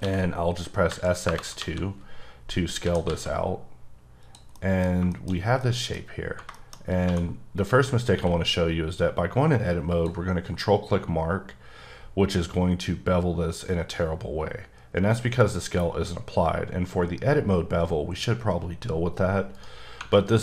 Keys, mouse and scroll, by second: 0.0 x, 0.9 KP_2, 1.2 KP_Enter, 1.6 KP_1, 2.8 s, 3.0 z, 4.2 click, 4.5 middle click, 6.0 scroll up 1, 6.2 Tab, 6.5 shift+middle click, 6.7 scroll up 1, 7.0 2, 7.5 click, 8.1 q, 9.9 ctrl+click, 10.9-13.9 scroll up 6, 13.9 scroll up 1, 19.5 right click.